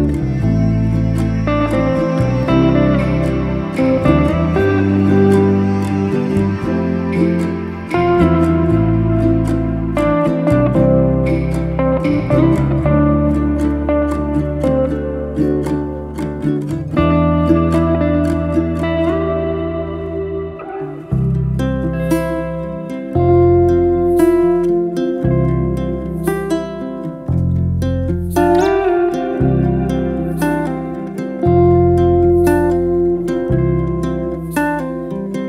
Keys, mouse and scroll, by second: 5.5 click, 6.8 click, 7.1 click, 7.5 click, 8.0 drag, 8.5-10.0 drag, 11.7-12.2 drag, 12.3 click, 12.6-14.0 drag, 14.6 scroll up 1, 14.9-17.7 scroll down 67, 17.7-19.6 drag, 22.2 click, 23.0 click, 24.2 click, 25.0-26.5 drag, 27.2 shift+a, 28.8 g, 31.0 click, 31.7 0, 33.5 click.